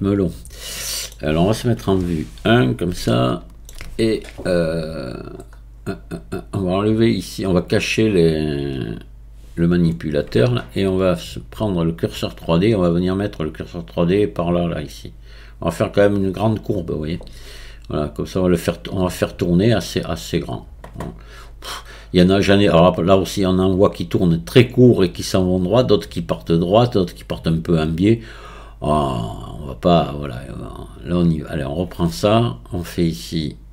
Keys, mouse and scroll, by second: 0.2-0.6 scroll up 1, 0.6-1.9 middle drag, 1.9 KP_1, 3.1-4.9 shift+middle drag, 4.9-8.1 scroll down 8, 8.1-8.7 scroll down 2, 8.7 click, 12.1-14.9 drag, 31.2 click, 33.4-33.7 drag.